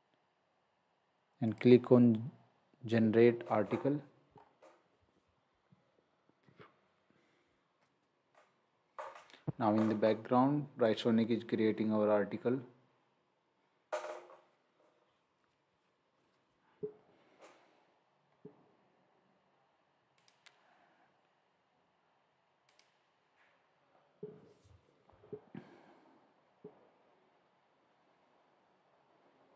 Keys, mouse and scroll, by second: 1.5 click, 4.3-5.1 scroll up 1, 20.2 click, 22.7 click.